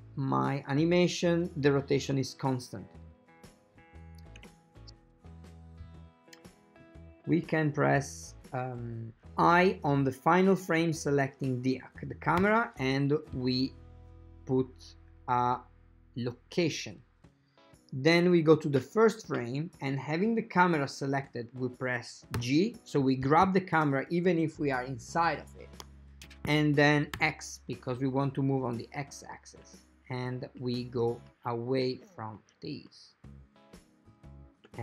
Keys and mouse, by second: 4.5 shift+space, 10.2-11.6 drag, 12.5 i, 17.4-18.6 drag, 23.9 g.